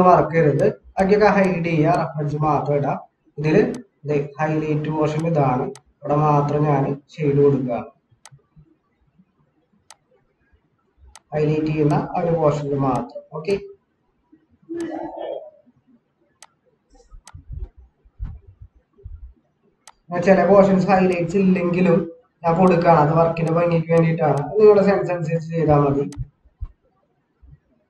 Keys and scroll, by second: 2.7 ctrl+=.